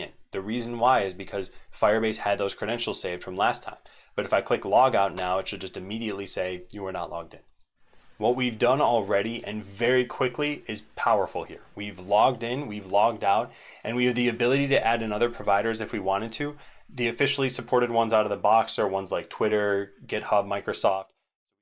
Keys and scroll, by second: 7.8 ctrl+Tab, 7.8 ctrl+c.